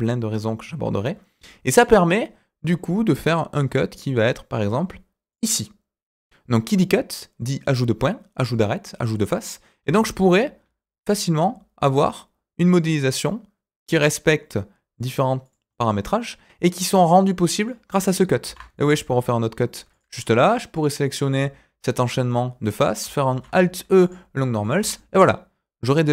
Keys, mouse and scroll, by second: 9.8 s, 15.7-17.6 middle drag, 18.4 ctrl+r, 20.7 click, 21.1 click, 21.9 alt+click, 22.2 middle click, 23.3 alt+e, 24.7 Tab, 24.9-26.1 middle drag.